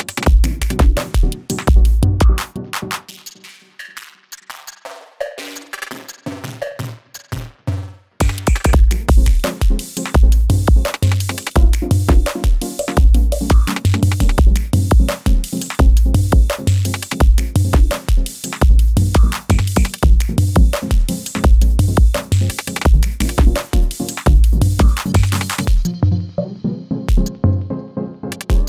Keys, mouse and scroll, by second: 4.0 click, 7.7 v, 9.0 click, 12.9-19.8 drag, 20.9 ctrl+d, 21.4 click, 25.5 ctrl+d, 25.9 click.